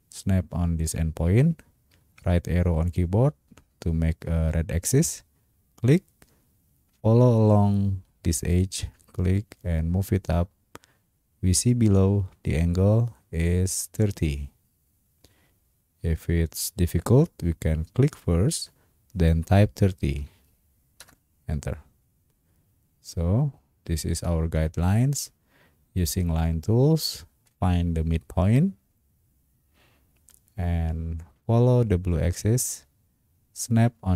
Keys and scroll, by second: 1.9 Right, 20.1 3, 21.0 Return.